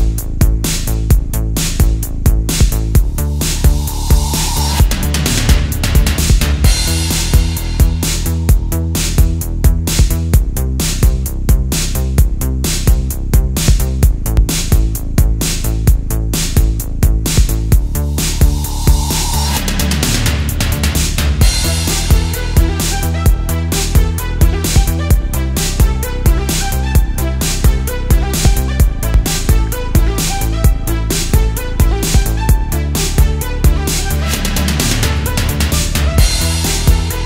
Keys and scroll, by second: 0.9 space, 2.7 space, 5.4 alt+super+space, 6.0 super+space, 6.3 super+space, 7.0 super+z, 7.9 super+z, 9.1 super+z, 9.6 space, 10.6 space, 11.2 super+space, 11.3 super+space, 14.0 space, 14.6 super+space, 17.3 space, 17.8 super+space, 17.9 super+space, 21.0 space, 21.5 space, 22.4 space, 23.5 space, 30.5 alt+super+space, 31.0 super+space, 32.7 alt+super+space, 33.5 super+space, 33.6 super+space, 34.0 super+z, 35.8 alt+super+space, 36.2 alt+super+space, 37.0 super+z.